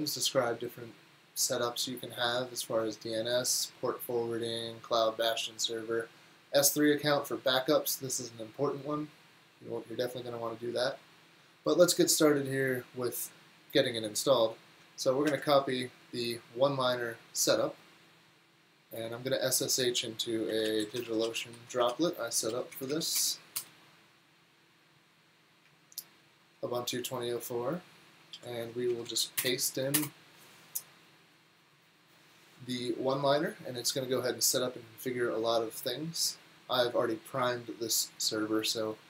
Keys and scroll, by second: 15.3 super+c, 20.3-22.0 typing, 22.5 Down, 22.7 Down, 22.9 Down, 23.2 Return, 28.3 alt+c, 28.9 Down, 29.1 Down, 29.4 Return, 30.0 Return.